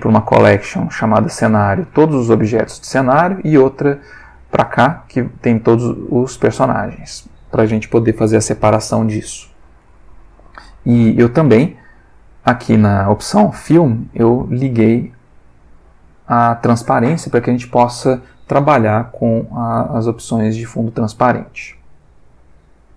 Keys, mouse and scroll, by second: 0.3 click, 4.7 click, 6.0 alt+Tab.